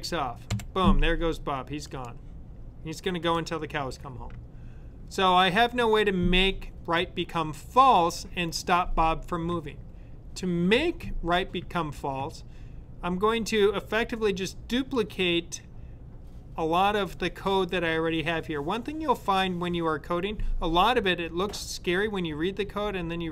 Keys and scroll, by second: 0.4 Right.